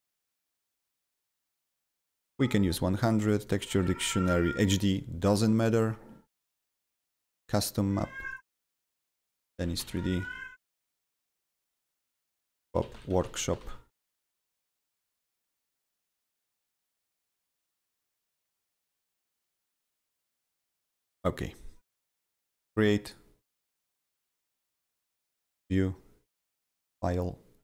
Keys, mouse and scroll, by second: 7.3 click, 7.3 click, 8.3 click, 9.0-10.5 typing, 12.8-14.1 typing, 21.0 click, 22.2 click, 22.2 click, 23.0 click, 25.2 click, 26.6 click.